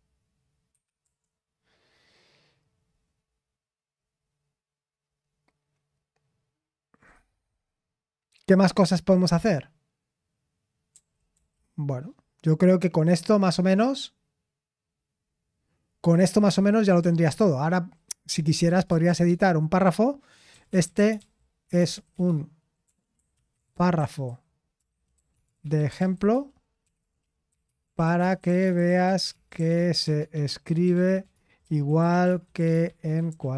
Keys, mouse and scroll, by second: 0.0-1.2 typing, 18.8 typing, 18.9 Return, 20.3-33.5 typing.